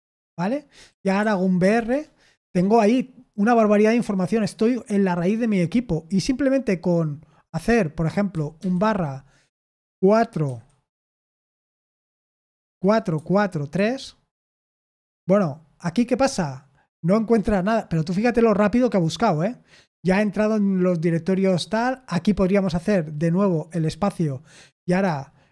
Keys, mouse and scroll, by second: 0.8 typing, 1.8 Return, 8.5 /, 10.4 3, 12.4-13.7 typing, 23.6 space.